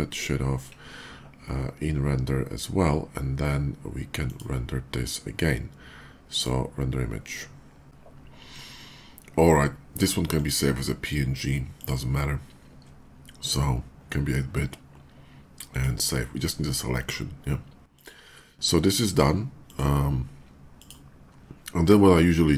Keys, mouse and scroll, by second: 4.0 click, 6.0 click, 7.8 click, 10.0 click, 11.5 click, 15.5 click, 17.7 click, 19.5 click, 20.6 click.